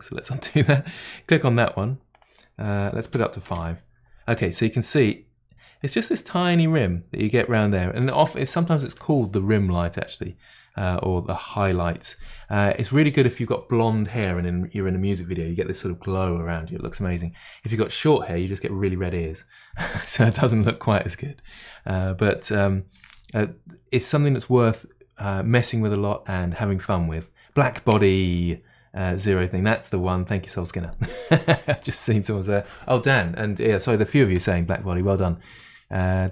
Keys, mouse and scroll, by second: 0.5 click, 2.1-4.5 drag, 4.3-5.4 middle drag, 5.4-5.8 scroll down 4, 5.8-36.3 middle drag.